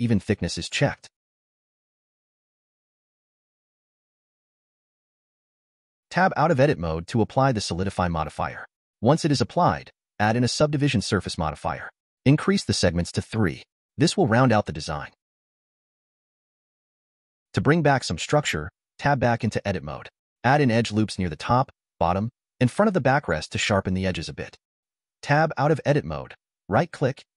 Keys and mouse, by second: 2.0-4.6 drag, 4.8 middle click, 6.1 Tab, 6.4-7.2 drag, 7.9-8.3 drag, 9.8-11.6 drag, 14.2-14.9 middle drag, 15.4 Tab, 15.8 click, 17.5 click, 18.4-19.8 drag, 24.0 click, 24.9 Tab, 27.2-27.3 drag.